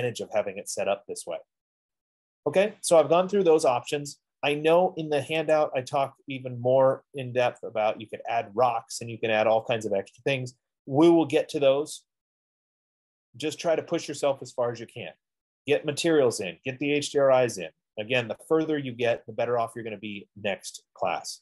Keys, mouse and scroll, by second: 5.9 click, 8.0 click, 8.9-9.2 scroll, 10.2 scroll, 10.4 middle click, 10.4 middle click, 15.8 middle click, 17.1 middle click, 18.2 middle click, 18.4 middle click, 18.7 middle click, 19.0 middle click.